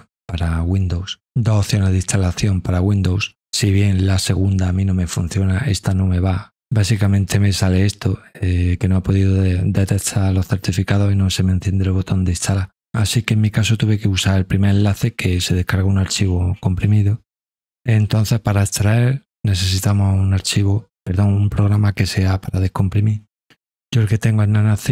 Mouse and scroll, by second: 8.9 scroll down 1, 9.3 middle click, 9.3 scroll, 10.4 middle click, 10.4 scroll, 18.5 right click.